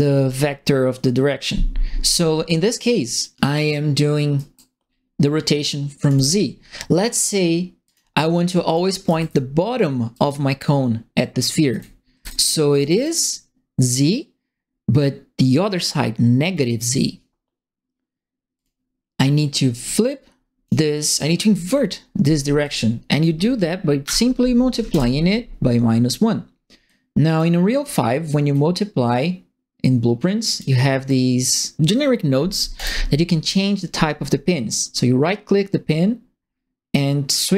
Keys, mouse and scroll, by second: 4.3 right click, 4.8 middle click, 6.0 click, 7.8 click, 8.6 click, 8.8-9.6 typing, 9.0-10.2 right drag, 11.7 right click, 11.7 e, 12.7 right click, 18.5 click, 20.0 click, 20.9 click, 22.6 click, 24.0 KP_Multiply, 24.9 Return, 26.8 click, 27.8 scroll up 2, 28.5-30.5 drag, 31.0 click, 32.7 right click.